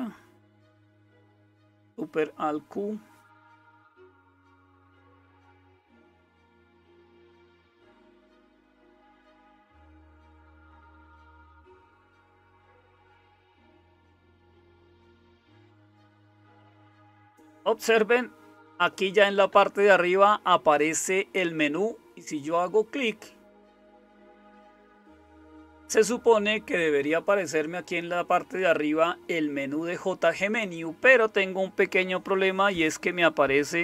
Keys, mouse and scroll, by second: 6.2-12.0 typing, 12.3 Return.